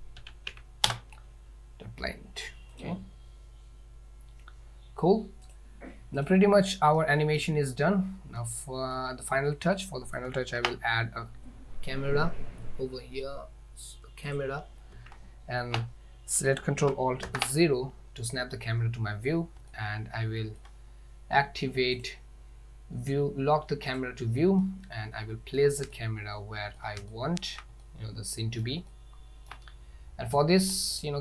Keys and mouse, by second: 5.5 click, 7.0-7.4 middle drag, 8.4-9.0 middle drag, 9.8 middle click, 10.6 shift+a, 17.3 ctrl+alt+KP_0, 19.8-20.6 ctrl+middle drag, 22.1 drag, 23.9 click, 24.7-25.6 ctrl+middle drag, 26.1-26.8 shift+middle drag, 27.2-27.6 shift+middle drag, 27.9 middle click, 29.0-29.5 shift+middle drag, 31.0 click.